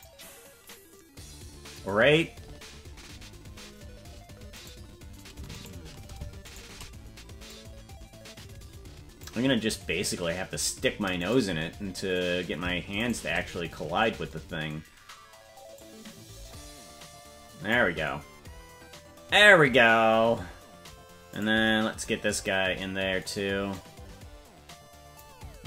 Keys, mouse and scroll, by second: 2.9-3.8 scroll down 5, 4.7 right click, 5.6 shift+right click, 7.5-9.3 drag, 11.3 right click, 13.1 shift+right click, 15.7-17.7 drag, 21.4 right click, 23.7-25.2 drag.